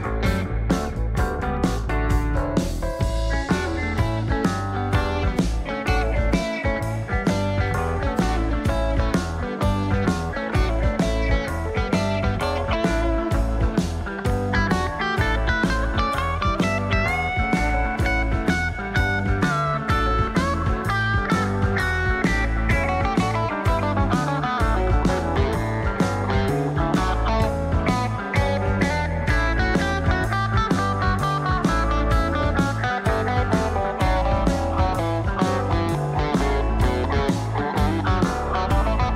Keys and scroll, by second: 3.7 Down, 4.6 Down, 18.0 Up, 18.0 shift+Left, 18.7 shift+Left, 37.3 ctrl+z.